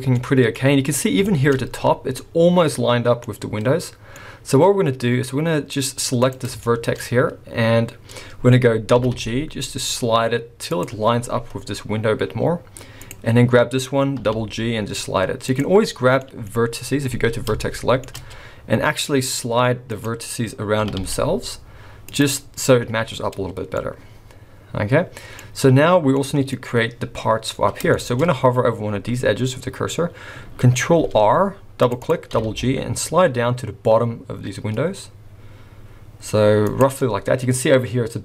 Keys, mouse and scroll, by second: 0.2 scroll up 2, 0.6 middle click, 1.2-3.2 shift+scroll up 3, 1.3 shift+middle click, 3.2 middle click, 4.2 scroll down 2, 4.8-6.2 scroll up 1, 6.2 click, 6.6 shift+middle click, 7.0 scroll up 1, 8.9 g, 13.0 click, 14.2 g, 16.2 middle click, 17.6 shift+middle click, 19.9 click, 20.8 g, 23.2 scroll down 4, 23.8 middle click, 25.2 middle click, 26.1 middle click, 26.6-27.9 scroll up 3, 28.0 shift+middle click, 30.8 ctrl+r, 32.3 g, 37.0 middle click, 37.4-38.2 scroll up 2.